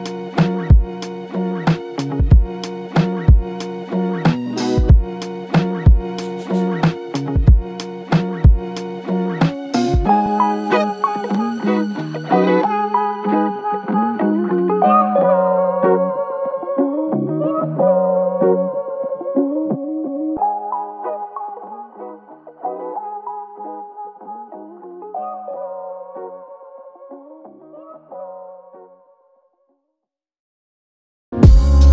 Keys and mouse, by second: 2.6 shift+click, 4.8 double click, 5.9 shift+click, 8.0 shift+click, 8.1 shift+click, 9.7 alt+click, 10.6 shift+click, 10.9 shift+double click, 11.5 shift+click, 15.7 double click, 29.2 shift+click, 30.4 shift+click.